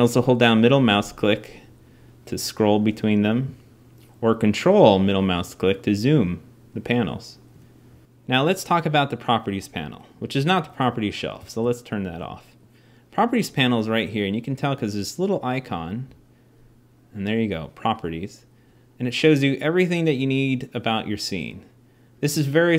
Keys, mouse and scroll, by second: 11.2 n.